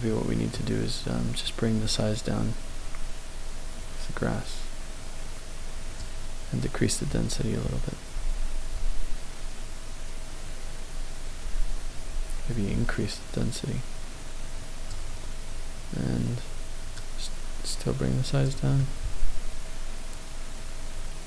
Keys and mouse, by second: 0.0-0.5 shift+middle drag, 2.0-6.0 drag, 6.6-14.9 drag, 17.0-18.5 drag, 18.8-21.2 middle drag.